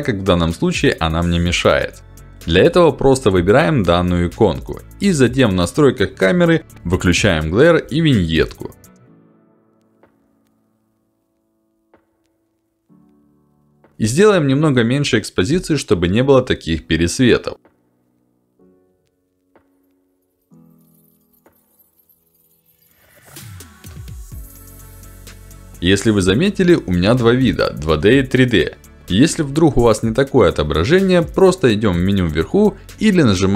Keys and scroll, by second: 2.7 ctrl+alt+d, 33.3 F1.